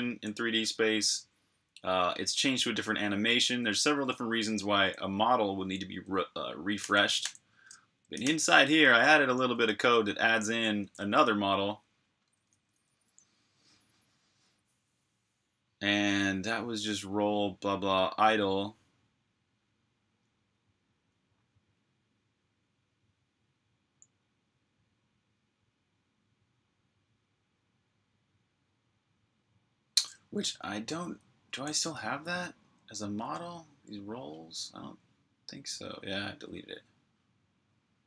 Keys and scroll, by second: 2.3-4.3 typing, 8.2-9.5 typing, 11.1 k, 12.2-12.8 typing, 31.7 super+Tab.